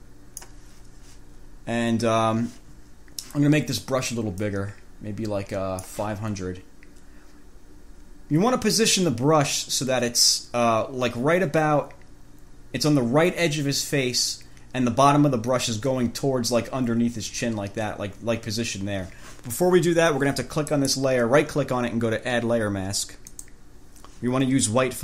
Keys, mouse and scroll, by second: 1.7-2.4 scroll down 2, 4.6-6.3 drag, 20.9 right click, 23.5 click.